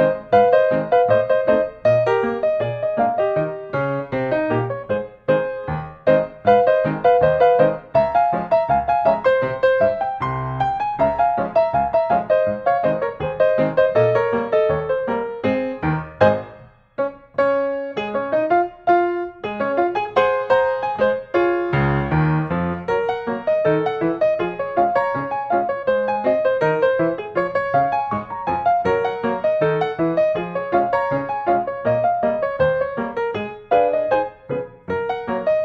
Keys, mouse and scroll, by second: 0.8 click, 4.8 middle click, 6.2 click, 7.0 click, 10.0 click, 10.6-12.3 drag, 13.1-14.2 drag, 18.4-19.5 middle drag, 19.6-20.7 drag, 21.4-22.5 middle drag, 22.6-23.7 drag, 24.9 click, 25.8 scroll, 28.0 middle click, 29.7 middle click, 31.2 click, 31.9 click, 33.6-34.7 drag, 35.4-35.6 drag.